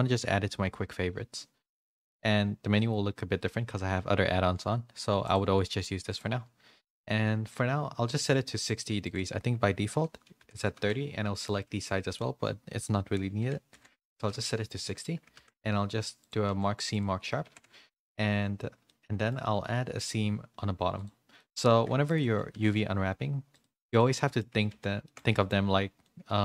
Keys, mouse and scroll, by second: 5.3 click, 9.0-10.8 drag, 12.1-14.4 drag, 15.3 ctrl+e, 17.4 ctrl+e, 17.4 a, 18.8 middle click, 18.8 a, 19.9 click, 19.9 2, 20.9 click, 21.3 middle click, 22.5 ctrl+e, 23.9 middle click, 24.5 a, 25.0 shift+middle click, 25.0 a, 25.2 middle click, 26.0-26.4 middle drag.